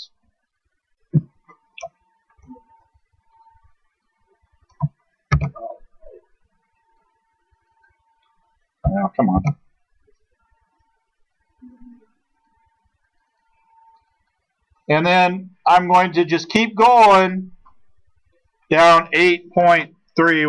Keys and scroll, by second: 5.4 ctrl+z, 9.4 ctrl+z.